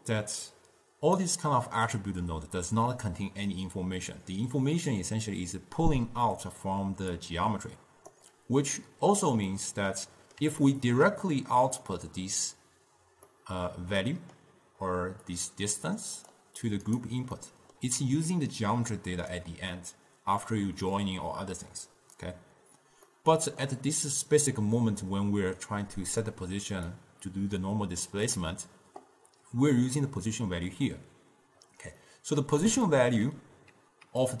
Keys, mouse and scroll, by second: 1.3-4.4 drag, 6.9 d, 7.3-8.3 drag, 8.3 d, 9.0 d, 9.6-10.7 middle drag, 10.7 scroll down 2, 10.8-15.5 ctrl+middle drag, 15.5 drag, 17.5 middle click, 18.1 d, 18.5-19.5 drag, 19.5 d, 21.3 d, 23.1 scroll up 2, 23.2-24.5 middle drag, 24.5 click, 27.1 click, 32.1-34.2 middle drag, 34.2-34.4 typing.